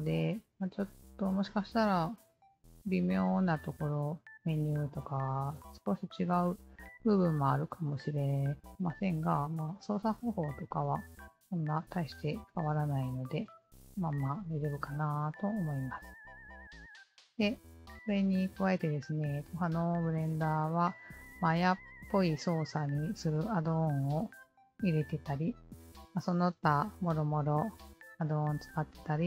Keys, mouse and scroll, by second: 12.1-15.4 alt+drag, 16.2-18.8 alt+drag, 19.7-22.1 alt+drag, 26.2-29.2 alt+drag.